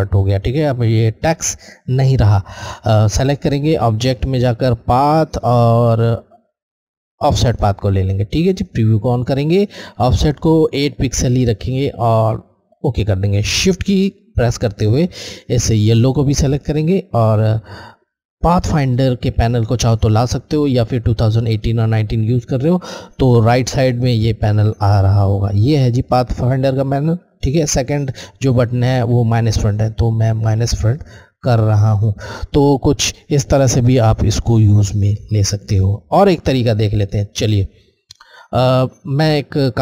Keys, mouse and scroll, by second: 3.7-5.9 drag, 7.1 click, 10.9 Left, 12.6 click, 15.8 shift+click, 29.2 Left, 29.3 click, 36.5 space, 36.8 click, 37.0 space.